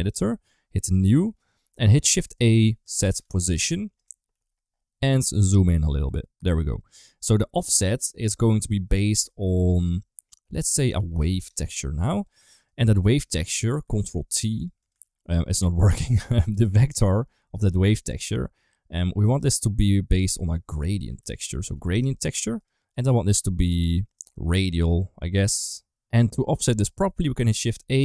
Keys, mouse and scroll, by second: 2.2 middle click, 2.4 shift+a, 4.2 n, 5.5 click, 5.7 click, 6.2 middle click, 6.7 click, 6.8 click, 7.2 middle click, 8.0-12.1 drag, 12.4 middle click, 13.9 ctrl+t, 14.4 click, 14.7 click, 15.3 middle click, 17.1 middle click, 17.7 click, 19.1 middle click, 20.4-22.5 drag, 22.8-24.1 drag, 24.8-25.9 middle drag, 25.9 ctrl+x, 26.4 middle click, 27.3 shift+a.